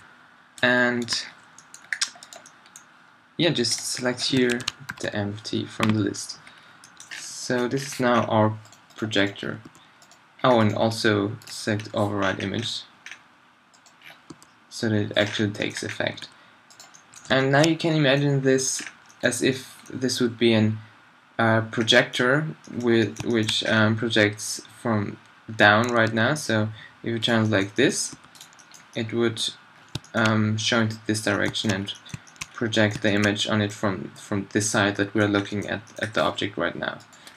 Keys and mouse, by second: 1.2 click, 2.2 middle click, 6.6 middle click, 7.2 middle click, 8.7-9.7 drag, 9.7 g, 11.7-12.3 middle drag, 12.3 drag, 13.2-14.1 drag, 14.1 middle drag, 14.3 g, 15.9-16.2 drag, 16.2 r, 17.5-17.9 drag, 23.3 middle drag, 26.1 r, 27.6-28.1 middle drag, 28.1 r, 29.8-31.3 drag, 31.7 middle click, 32.0 middle drag, 35.3-35.7 middle drag, 36.0-36.4 middle drag, 36.4 g, 37.1 click.